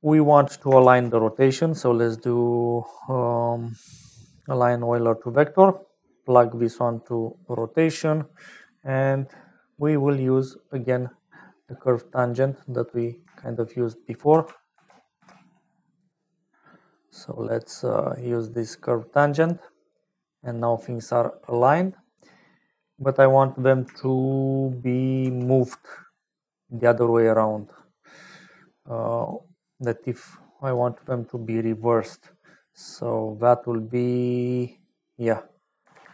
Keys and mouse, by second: 0.5 click, 0.7 shift+a, 5.6 click, 7.0 click, 7.9 click, 9.1 middle click, 11.7 middle click, 12.8 click, 14.7 ctrl+c, 15.4 ctrl+v, 15.9 g, 17.3 click, 18.6 click, 20.4 click, 21.1 middle click, 23.1 middle click, 25.2 shift+a, 30.1 click, 31.1 middle click, 33.5-34.8 drag, 35.0-36.1 drag.